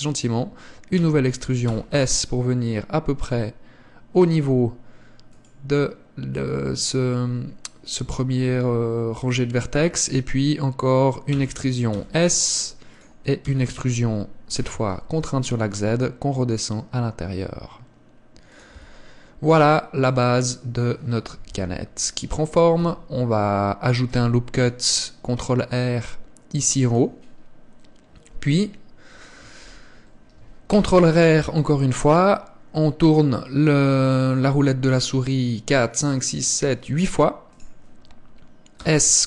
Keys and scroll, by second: 1.1 e, 11.4 e, 13.6 e, 18.8 Tab, 21.6 KP_1, 22.9 Tab, 24.2 ctrl+r, 30.8 ctrl+r, 38.9 s.